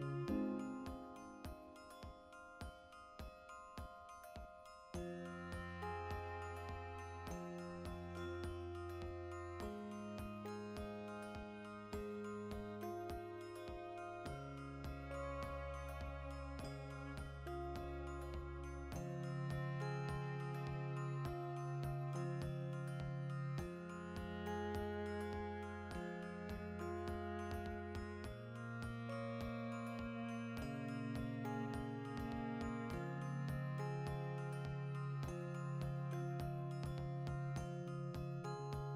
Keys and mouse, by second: 0.1 right click, 0.2 ctrl+r, 0.6 right click, 0.7 ctrl+z, 0.7 middle click, 1.1 ctrl+r, 1.4 right click, 1.5 ctrl+r, 1.8 right click, 2.0 a, 2.2-4.4 middle drag, 4.4-5.5 drag, 5.5 middle click, 6.1-7.1 alt+shift+right drag, 7.1 ctrl+b, 9.7 click, 10.0 a, 10.1-11.2 ctrl+middle drag, 11.2 alt+s, 11.7 right click, 11.8-13.0 middle drag, 13.0 alt+e, 14.8 click, 14.9 middle click, 15.1 ctrl+middle click, 15.2 middle click, 15.5 shift+middle click, 15.7 middle click, 19.1 ctrl+r, 19.7 right click, 20.3 ctrl+b, 21.2 shift+click, 21.2 middle click, 21.8 ctrl+r, 22.3 right click, 22.4 ctrl+b, 23.4 click, 23.6 middle click, 24.5 right click, 24.8 middle click, 25.1 right click, 25.4 l, 25.6-27.6 ctrl+shift+middle drag, 26.0 alt+o, 26.7 shift+d, 27.6 shift+click, 27.9 shift+r, 29.0 l, 30.2 ctrl+i, 30.6 x, 31.2-34.4 middle drag, 31.4 Tab, 32.1 Tab, 33.1 a, 33.4 g, 34.4-35.5 alt+right drag, 35.5 middle click, 36.0 alt+shift+right click, 36.4 middle click, 37.0 click, 37.4 g, 38.1 click, 38.2 middle click, 38.3 Tab, 38.6 ctrl+middle click.